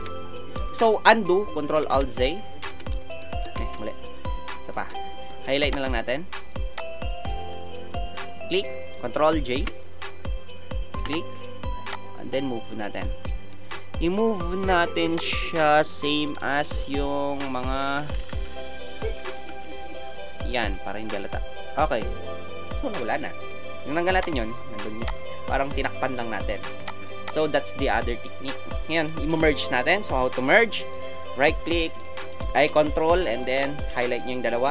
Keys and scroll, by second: 3.5 ctrl+alt+z, 9.6 ctrl+j, 17.9 Down, 18.0 Down, 18.2 Down, 18.2 Right, 18.3 Down, 18.5 Down, 18.9 Right, 19.0-19.5 typing, 19.7 Down, 20.5 Left.